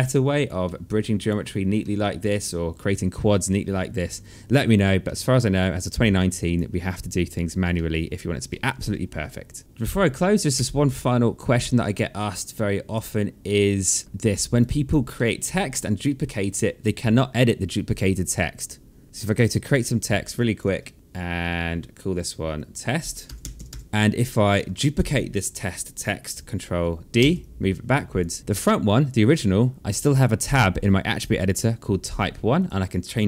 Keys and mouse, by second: 0.2 alt+middle click, 0.5 alt+click, 1.3 alt+middle click, 3.0 alt+middle click, 4.6 alt+middle click, 4.9 alt+right click, 5.7 alt+click, 7.3 alt+middle click, 9.6 click, 10.3 w, 11.3 click, 13.4 click, 14.0 alt+middle click, 14.3 alt+click, 14.8 alt+middle click, 15.4 alt+click, 19.0 click, 20.1 alt+click, 21.6 click, 23.0-23.9 typing, 23.8 click, 24.4 alt+click, 26.9 ctrl+d, 27.1 click, 28.4 click, 29.8 click, 32.3 click.